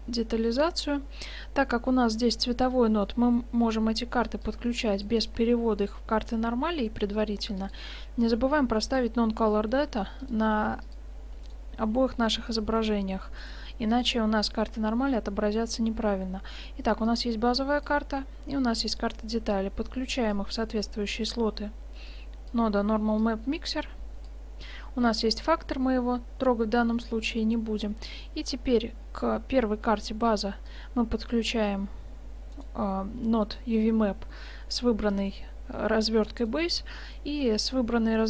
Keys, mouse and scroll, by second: 3.1 middle click, 4.6-6.4 drag, 7.7-9.5 drag, 9.8-11.5 drag, 12.1 g, 12.3-13.5 drag, 13.5-15.3 drag, 13.7 g, 15.3-16.0 middle drag, 17.1-18.9 right drag, 18.9 middle click, 19.0 drag, 19.6-21.5 drag, 22.2-25.0 drag, 26.7-27.3 middle drag, 29.1-29.9 middle drag, 30.7-32.3 drag, 32.7-34.5 drag, 36.3 click.